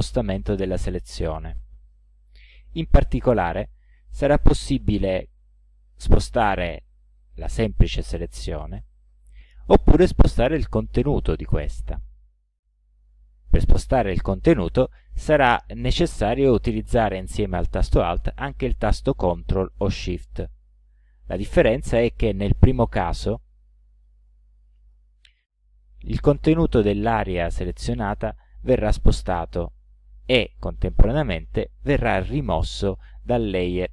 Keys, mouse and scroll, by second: 5.6-6.7 alt+drag, 9.2 ctrl+z, 24.1-25.1 ctrl+alt+drag.